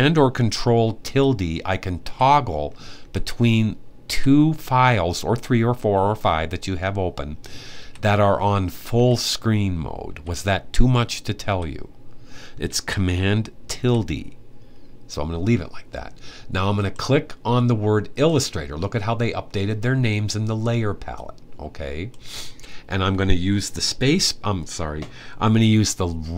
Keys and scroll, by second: 0.7 super+`, 1.8 super+`, 2.7 super+`, 3.8 super+`, 7.5 `, 13.5 super+`.